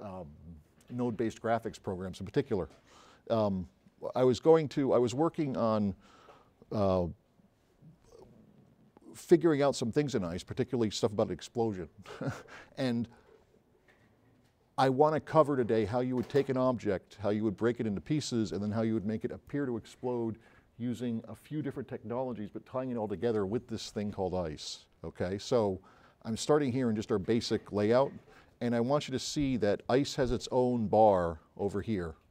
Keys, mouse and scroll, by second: 14.0 click, 30.4 click.